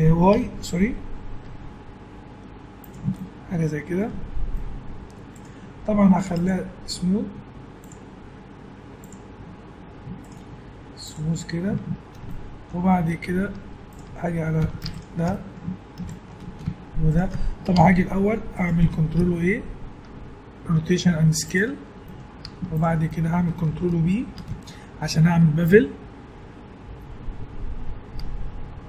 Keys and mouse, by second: 3.1-4.7 middle drag, 4.1 Tab, 7.6 Tab, 11.7 Tab, 12.8-14.0 middle drag, 13.6 Tab, 14.6 a, 17.7 Tab, 19.2 ctrl+a, 22.0-23.1 middle drag, 22.4 Tab, 24.3 ctrl+b.